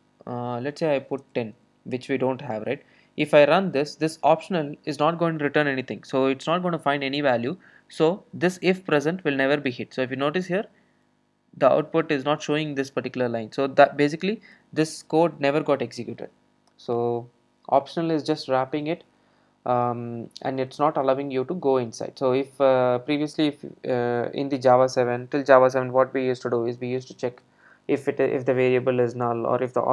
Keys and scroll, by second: 3.6 super+r.